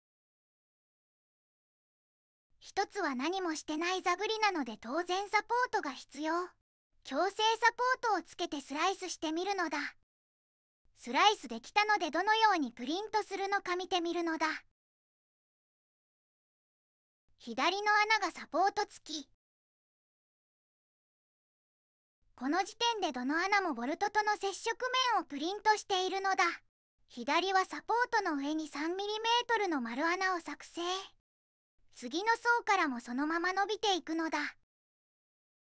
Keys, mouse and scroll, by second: 0.2 right click, 2.9 click, 9.9 click, 11.4 middle click.